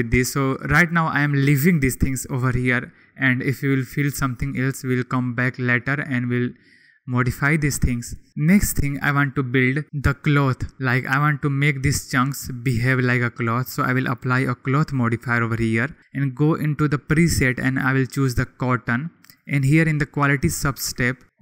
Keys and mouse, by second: 14.3 click, 16.4-18.7 drag, 19.3-21.4 drag.